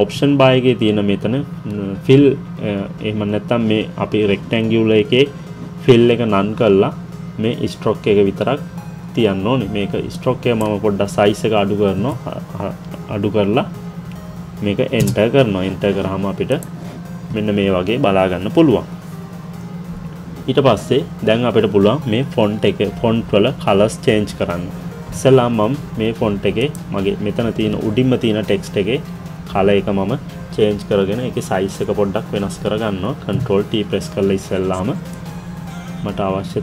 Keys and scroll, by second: 15.1 Return.